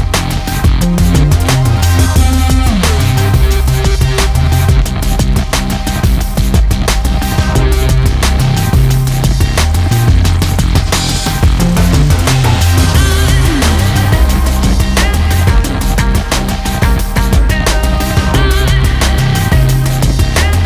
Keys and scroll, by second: 3.8 ctrl+space, 4.2 ctrl+space, 4.3 ctrl+space, 12.9 ctrl+space, 13.4 ctrl+space, 13.6 ctrl+space.